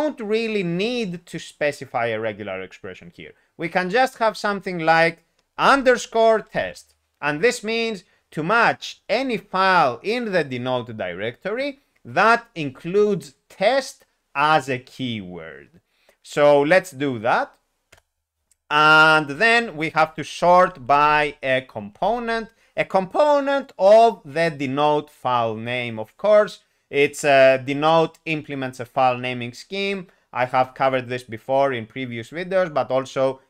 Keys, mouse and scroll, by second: 5.6-6.6 typing, 17.9 ., 17.9 Return.